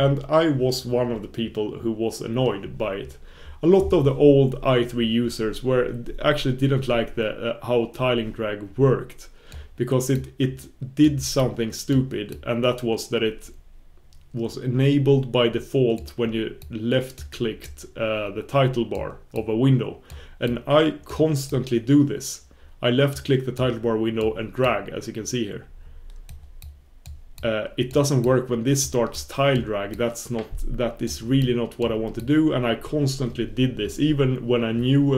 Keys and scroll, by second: 12.3 super+b, 26.3 super+b, 27.4 super+b, 31.4 super+b.